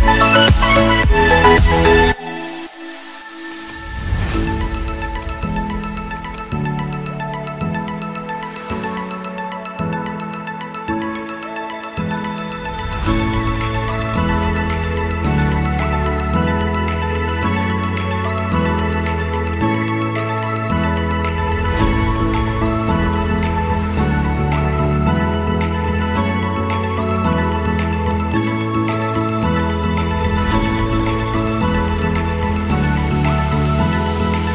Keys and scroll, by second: 3.8 Escape, 33.3 ctrl+Page_Down.